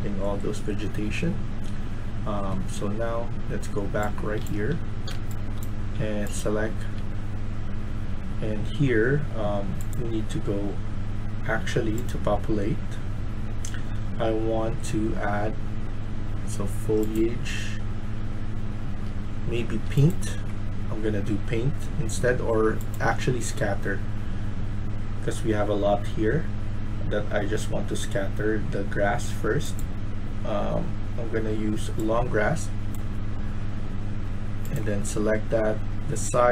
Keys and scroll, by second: 3.7-6.8 typing, 18.8-19.5 d, 19.6 s.